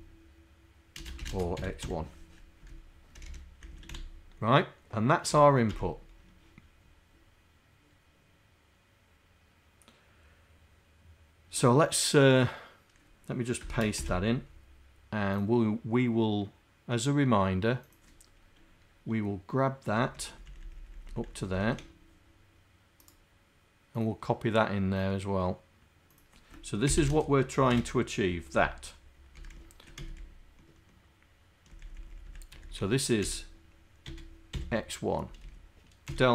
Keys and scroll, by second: 1.1 ..